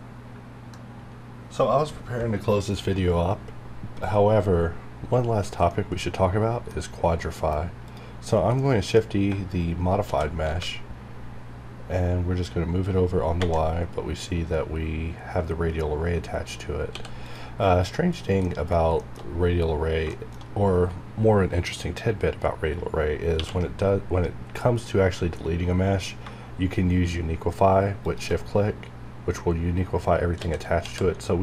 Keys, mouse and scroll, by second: 7.2 middle click, 7.8 click, 8.2 scroll down 1, 8.6 middle click, 8.9 scroll down 1, 10.0 shift+d, 10.4 y, 16.9 x, 17.2 click, 18.2 scroll down 1, 18.4 middle click, 18.7 scroll down 1, 19.0 shift+middle click, 19.2 shift+scroll up 1, 20.0 scroll up 1, 20.1 shift+middle click, 20.4-21.1 shift+scroll down 1, 22.3-22.8 scroll down 1, 23.4 q, 26.2 q, 28.0 shift+click, 30.4-30.8 typing.